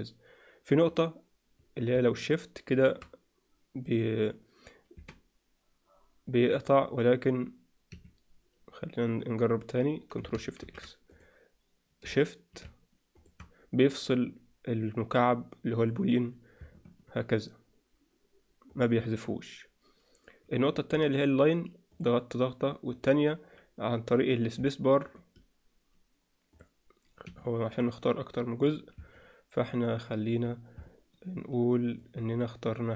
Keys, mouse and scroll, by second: 10.5 ctrl+shift+x, 24.9 click, 25.0 space, 25.1 space, 25.2 space, 26.5 click, 27.2 Escape, 27.6 click, 29.1-30.2 alt+middle drag, 30.8-31.9 middle drag, 32.2 click.